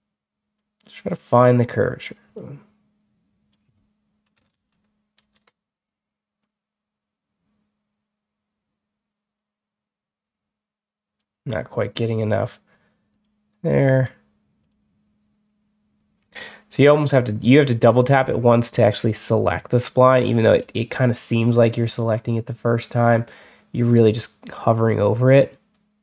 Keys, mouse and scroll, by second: 0.4-1.3 drag, 2.2-3.4 drag, 4.4 ctrl+z, 5.0 ctrl+z, 6.3-11.0 drag, 11.8 right click, 13.0 click, 13.8 click, 14.5 click, 16.7 Escape, 18.9-20.5 drag, 21.2-23.8 drag, 24.6-25.4 drag.